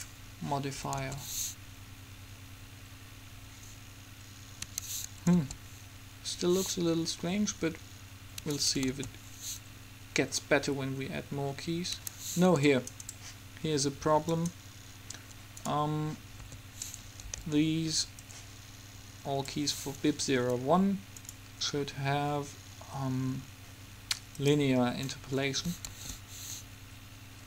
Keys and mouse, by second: 1.1 alt+a, 4.8 Escape, 5.5 alt+a, 8.7 Escape, 9.1 alt+a, 12.1 Escape, 12.8-14.5 right drag, 14.5-16.4 drag, 16.7 a, 17.5 b, 21.3-23.1 drag, 26.1 alt+a.